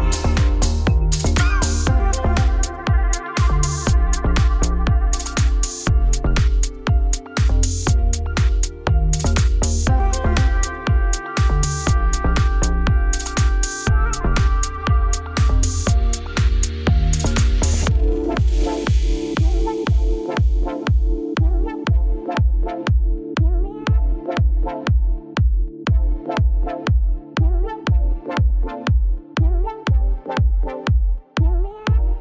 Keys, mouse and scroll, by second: 0.1 f, 0.2 scroll down 3, 0.5-1.7 shift+middle drag, 3.7 alt+click, 4.0 alt+click, 4.6-7.2 typing, 5.0 alt+click, 5.7 alt+click, 6.4 alt+click, 7.4 click, 7.9 shift+middle click, 8.8 alt+click, 9.2 f, 9.8 alt+click, 10.2 f, 10.6 middle click, 11.0 scroll down 1, 11.1-12.7 shift+middle drag, 15.8 alt+click, 16.3 Tab, 16.7 click, 17.0 click, 17.4 click, 17.6 click, 17.7-18.9 drag, 20.2-21.6 drag, 21.6-22.1 scroll down 1, 22.1-23.3 drag, 23.4-23.7 scroll down 6, 23.7 scroll up 2, 23.9-25.3 shift+middle drag, 25.3 scroll down 1, 25.5 middle click, 25.8 Tab, 26.0 middle click, 26.2 2, 26.4 alt+click, 26.8 alt+shift+click, 27.9-29.0 middle drag, 29.0 e, 30.4 middle click, 30.9 ctrl+f.